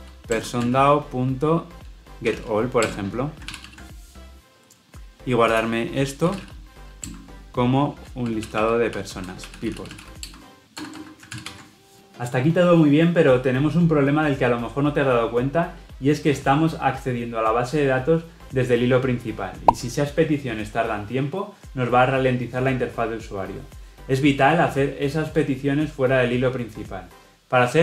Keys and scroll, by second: 3.3 ctrl+alt+l, 6.1 ctrl+alt+o, 7.4 Return, 11.2 ctrl+alt+l, 11.3 ctrl+alt+o.